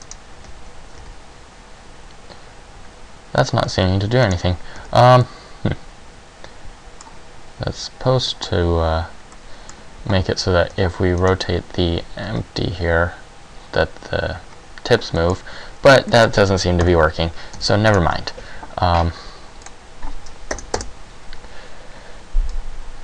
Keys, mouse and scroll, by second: 0.2 right click, 0.6 z, 1.2 r, 3.7 z, 4.5 right click, 4.9 z, 5.3 middle click, 9.5 middle click, 10.9 z, 11.4 right click, 12.4 r, 15.3 middle click, 16.2 middle click, 16.9 KP_1, 17.7 z, 18.1 right click, 19.9 click, 22.7 click.